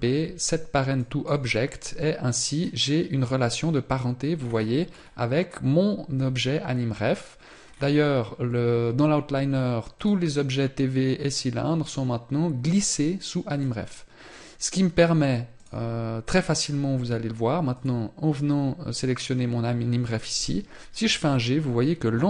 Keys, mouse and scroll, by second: 1.9 scroll down 1, 7.2 scroll down 4, 9.3 click, 15.7-17.1 scroll down 2, 19.1 scroll down 1, 19.8-20.3 scroll down 3, 20.3 g.